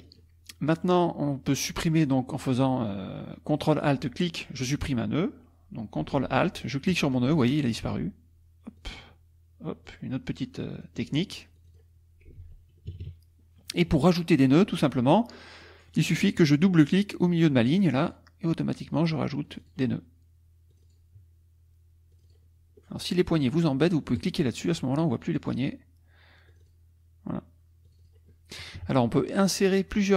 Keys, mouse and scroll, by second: 0.0 click, 0.5 click, 6.9 ctrl+alt+click, 7.4 ctrl+alt+middle click, 8.8 ctrl+alt+click, 9.9 ctrl+alt+click, 10.7 ctrl+alt+click, 11.6 ctrl+click, 12.4 ctrl+z, 12.9 ctrl+KP_Subtract, 13.6 click, 14.9 click, 15.6 click, 17.3 click, 17.9 click, 19.4 click, 20.7 click, 22.1 click, 24.2 click, 25.4 click, 26.5 click, 27.9 click, 28.8 KP_Subtract, 29.3 click, 29.3 middle click.